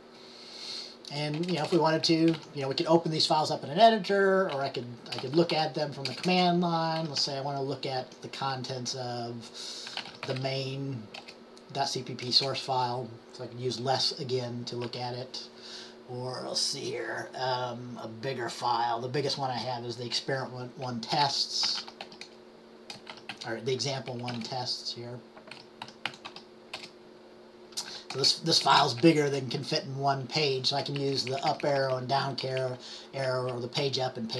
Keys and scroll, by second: 5.3-7.8 typing, 9.8-10.9 typing, 21.1-26.9 typing, 28.7-29.7 typing, 31.2 Down, 31.3 Down, 31.5 Down, 31.6 Up, 31.8 Up, 31.9 Up, 32.1 Up, 32.6 Page_Down, 32.7 Page_Down, 33.4 Page_Up, 33.9 Page_Down, 34.0-34.3 typing.